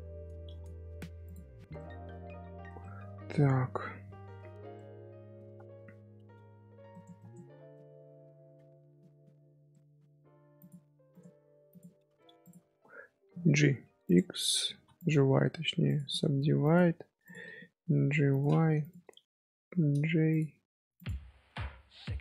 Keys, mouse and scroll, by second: 0.6-1.2 middle drag, 1.2 click, 1.7 middle click, 2.0 z, 2.8 middle drag, 3.0 z, 3.2 middle click, 3.7 z, 4.7-6.2 middle drag, 6.2 ctrl+r, 7.1-7.7 right drag, 7.7 middle click, 8.4 2, 8.9-10.0 middle drag, 10.0 scroll down 1, 10.1 2, 10.4 scroll up 1, 10.5 click, 11.9 1, 12.4 click, 15.8 click, 16.8 1, 17.2 click, 17.4-18.0 middle drag, 18.0 g, 18.8 shift+click, 19.6 j, 20.3 click, 20.9 shift+click, 22.1 j.